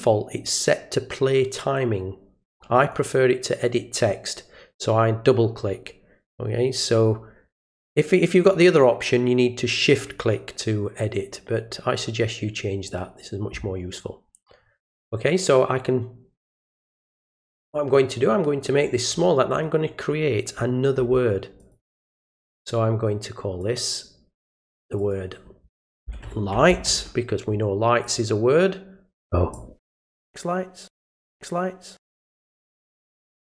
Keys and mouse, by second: 2.9 click, 8.4 click, 10.2 click, 12.9 click, 17.7-19.1 drag, 19.5 click, 21.6 click, 23.6 click, 24.8 click, 25.0 click, 28.0 click, 29.5 click.